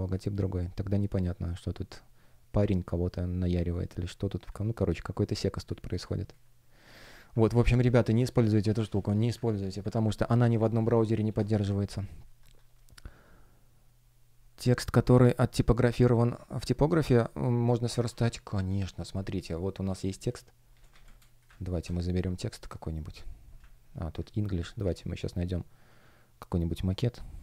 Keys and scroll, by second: 3.4 space, 7.7 super+w, 9.8 super+w, 12.3 F1, 21.0 space, 21.6 shift+super+t, 24.8 super+w.